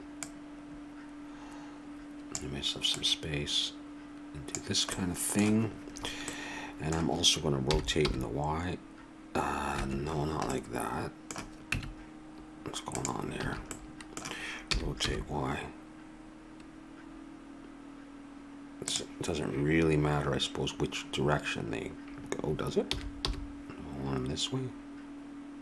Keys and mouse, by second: 2.1 middle click, 7.7 r, 11.6 Tab, 13.4 a, 14.6 r, 22.9 r.